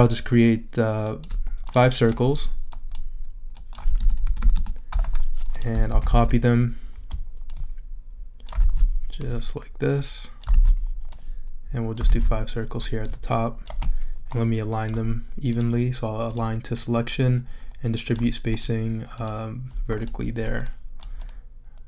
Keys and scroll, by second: 3.7-4.7 typing, 5.9 super+c, 6.1 super+v, 8.6 super+v, 10.5 super+v, 12.0 super+v.